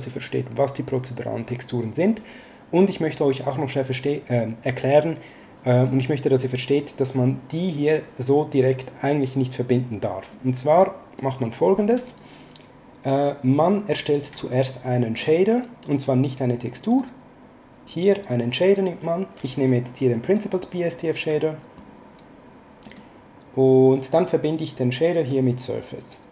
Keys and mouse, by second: 10.3 click, 15.2 click, 16.9 click, 20.2 click, 22.8 click, 24.5 click.